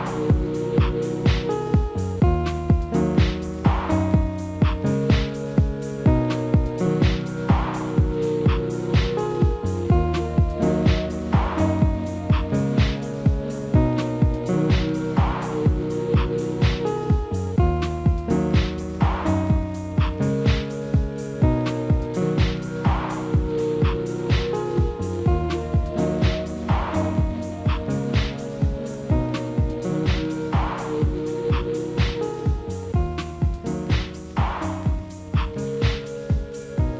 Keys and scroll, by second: 4.8 alt+w, 11.9 ctrl+z.